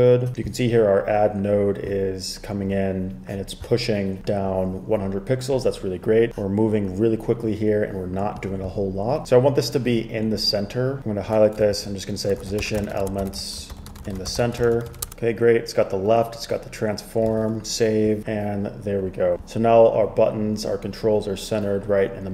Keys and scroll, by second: 11.9 super+k, 12.2-15.5 typing.